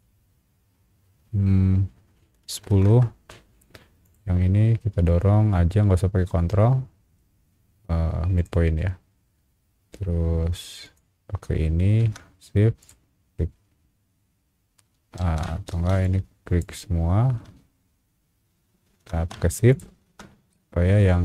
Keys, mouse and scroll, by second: 2.4 KP_1, 2.8 KP_0, 2.9 KP_Enter, 4.0 click, 8.3 click, 10.8 click, 12.8 click, 15.2 ctrl+z, 15.7 space, 16.0 click, 19.7 shift+click, 20.5-21.2 shift+middle drag.